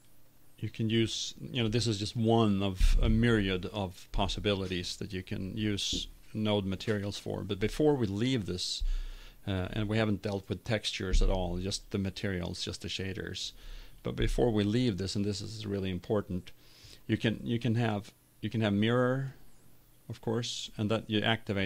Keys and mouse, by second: 0.9-3.5 drag, 11.5-14.2 drag, 15.4 click, 16.7 click, 18.1-19.6 drag, 20.7 click.